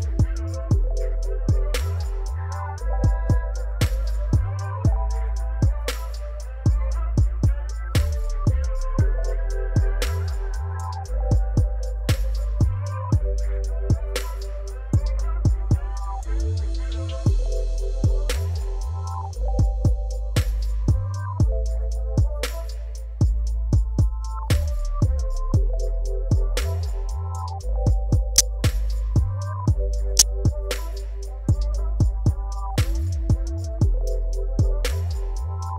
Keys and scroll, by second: 0.9 r, 1.0 z, 1.7 alt+a, 2.8 g, 2.9 z, 3.4 alt+a, 4.4 g, 4.5 z, 6.0 g, 6.1 z, 8.7 shift+d, 8.7 r, 9.8 alt+a, 12.1 g, 12.2 z, 12.6 alt+a, 14.7-18.1 typing, 18.6 alt+a, 19.9 r, 20.0 x, 20.5 alt+a, 21.3 shift+d, 21.4 r, 22.5 Tab, 22.7 s, 23.4 Tab, 23.6 g, 26.7 g, 26.8 z, 27.4 alt+a, 29.4-31.4 typing, 32.6 r, 32.7 z, 33.8 r, 33.9 z, 34.4 alt+a.